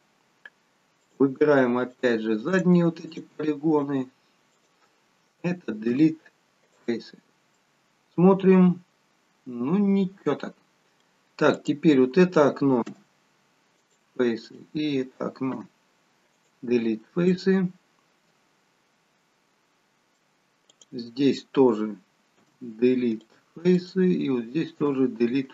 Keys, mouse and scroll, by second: 1.1 click, 1.9 shift+click, 3.2 click, 5.9 Delete, 7.7 middle click, 11.6 click, 12.9 Delete, 14.5 click, 15.7 Delete, 17.3 middle click, 20.8 click, 22.5 Delete, 24.9 Delete, 24.9 click.